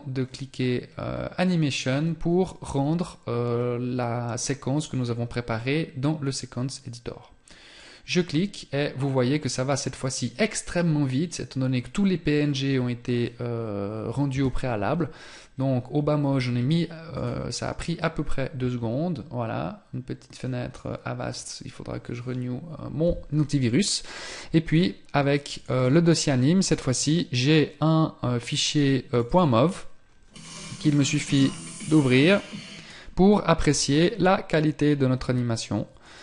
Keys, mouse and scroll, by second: 6.3 click.